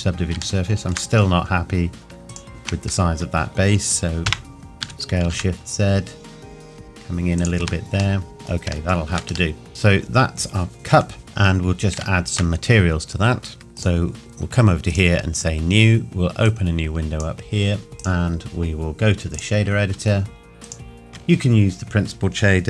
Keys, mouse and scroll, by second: 0.6 shift+middle click, 1.1 scroll up 1, 2.3 alt+click, 4.3 ctrl+KP_Add, 4.8 s, 5.2 shift+z, 7.4 click, 7.6 Tab, 8.2 middle click, 8.9 shift+middle click, 9.2-9.5 shift+scroll down 1, 9.5 middle click, 9.7 scroll down 1, 10.7 middle click, 13.6 ctrl+s, 13.8 click.